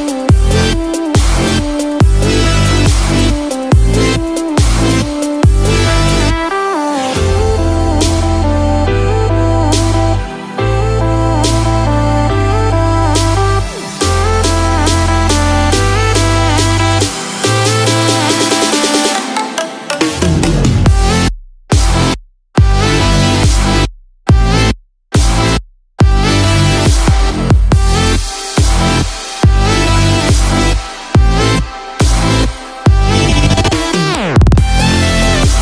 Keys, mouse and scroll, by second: 24.2-24.5 scroll up 1.